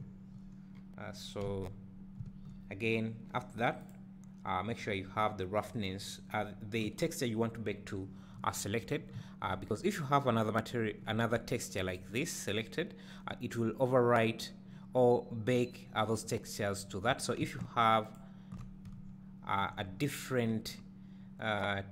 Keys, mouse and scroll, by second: 0.0 ctrl+shift+click, 3.8-4.4 drag, 12.0-13.4 drag, 18.2 ctrl+shift+click, 19.0 `.